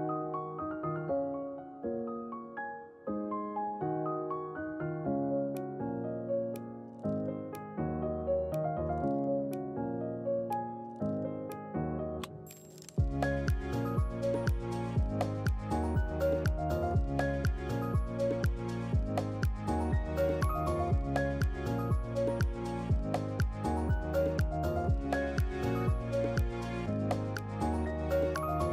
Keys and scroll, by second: 11.8-12.6 typing, 19.9 typing, 21.2-22.0 typing, 27.0 ctrl+c, 27.3 ctrl+v.